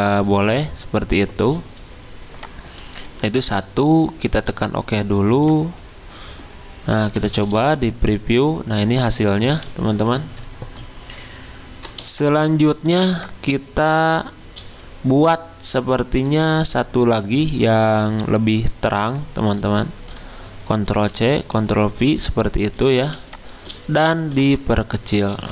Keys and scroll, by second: 7.4 f, 10.1 Escape, 20.9 ctrl+c, 21.5 ctrl+f.